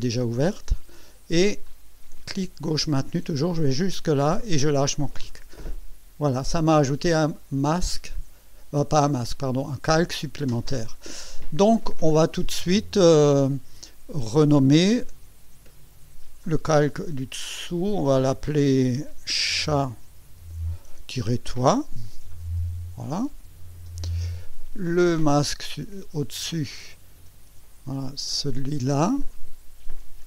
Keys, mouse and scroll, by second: 14.3 click, 15.5 F2, 19.3-22.9 typing, 23.9 Return, 25.9 click, 29.3 ctrl+click.